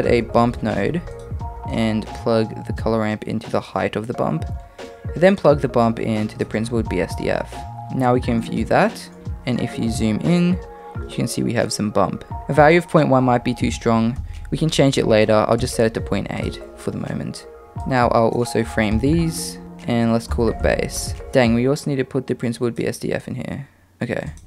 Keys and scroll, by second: 18.7 d, 18.9 f.